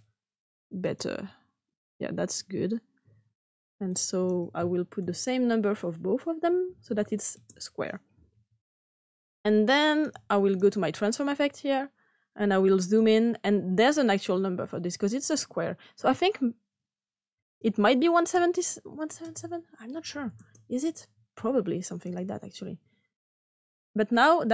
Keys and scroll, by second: 6.7 @, 6.8 ^, 7.3 Return, 9.7 typing, 19.9 &, 20.1 &, 20.3 Return.